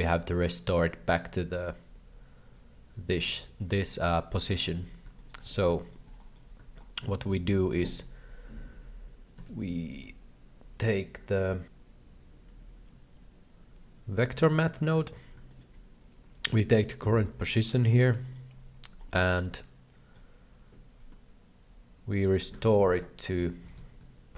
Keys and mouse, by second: 1.1 click, 1.6 click, 2.1 click, 2.5 click, 2.9 click, 3.5 shift+middle click, 4.6 shift+middle click, 5.2 shift+middle click, 5.5 alt+a, 5.8 shift+middle click, 6.1 shift+middle click, 6.9 shift+middle click, 9.3 shift+a, 15.6 middle click, 16.0-17.0 drag, 17.8 ctrl+c, 18.3 shift+middle click, 19.1 middle click, 19.6 shift+middle click, 22.1-24.3 drag.